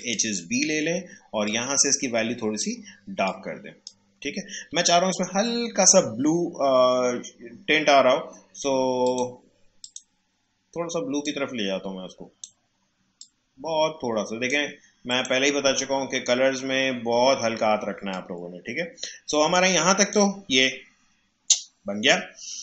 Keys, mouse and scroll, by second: 9.0-15.1 drag, 16.4 alt+scroll down 1, 17.1 alt+scroll up 1, 17.8 space, 18.1 click, 18.3 space, 20.0 click.